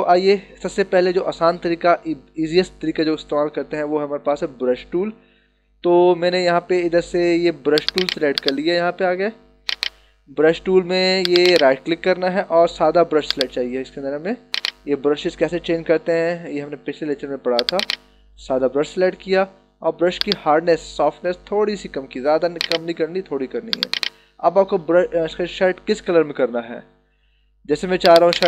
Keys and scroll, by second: 4.2 ctrl+=.